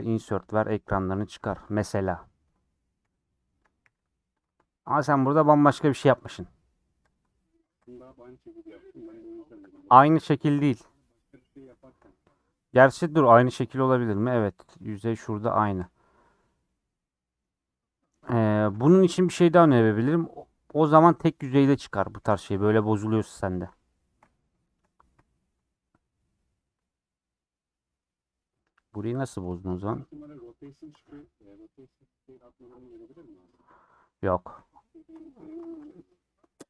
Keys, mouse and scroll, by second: 0.2 shift+click, 0.7 shift+click, 1.1 shift+click, 1.4 shift+click, 1.7 shift+click, 2.0 shift+click, 2.2 shift+click, 3.0 i, 3.8 e, 4.5 Tab, 4.7-7.1 middle drag, 7.1 click, 11.0 middle click, 12.0 scroll up 2, 12.4-15.9 middle drag, 15.9 click, 16.6-22.3 middle drag, 22.3 x, 23.0 Left, 23.5 KP_Decimal, 23.9 scroll down 2, 23.9 middle click, 24.3 scroll up 2, 25.1 scroll up 1, 25.1-29.0 shift+middle drag, 29.0 scroll up 1, 29.3-31.7 middle drag, 31.7 scroll down 3, 32.0 middle click, 32.6 scroll down 1, 32.7-34.2 middle drag, 34.2 KP_1, 34.5 KP_3, 34.9 scroll up 4, 35.3 Tab, 35.6 alt+z.